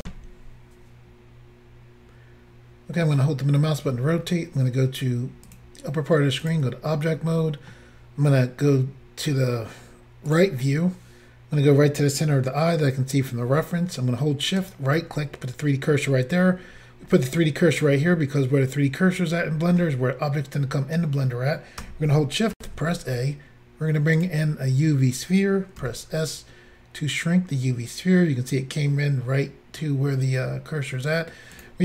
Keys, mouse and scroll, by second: 0.0 Insert, 2.9 scroll up 1, 3.0 middle click, 4.0 scroll down 2, 5.5 click, 6.5 click, 6.6 click, 7.4 middle click, 10.4 click, 11.6 click, 14.7 shift+right click, 22.6 a, 24.2 click, 25.8 s, 31.5 click, 31.6 click.